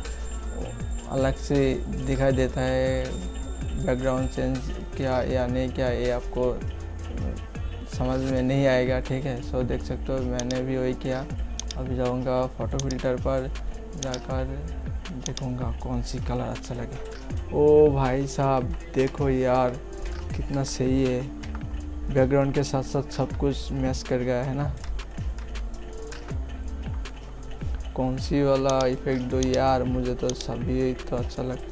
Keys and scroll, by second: 18.0 Up, 18.6 Down, 22.6 Up, 24.5 Up.